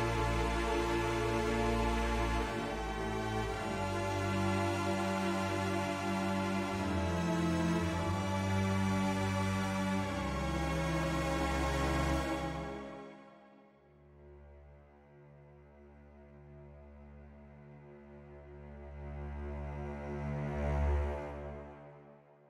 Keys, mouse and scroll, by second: 0.2 click, 1.8 click, 2.8 middle click, 4.2-5.8 drag, 6.7-8.7 drag, 9.1 ctrl+z, 9.5 middle click, 10.8 middle click, 11.8-15.1 drag, 15.4 middle click, 16.4 middle click, 17.8-20.1 drag, 20.5 middle click.